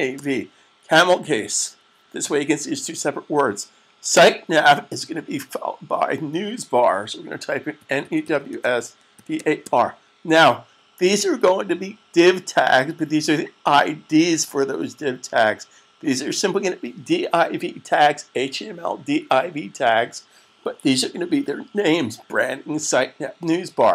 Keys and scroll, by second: 7.6-9.4 typing.